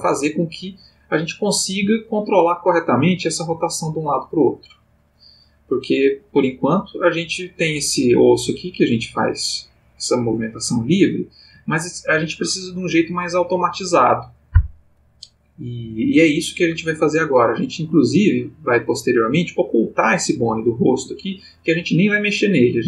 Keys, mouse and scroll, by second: 0.0 ctrl+shift+middle click, 0.8 click, 1.7 g, 10.2 Escape, 10.9 ctrl+middle click, 18.1 click, 19.2 click, 19.8 g, 20.9 Escape.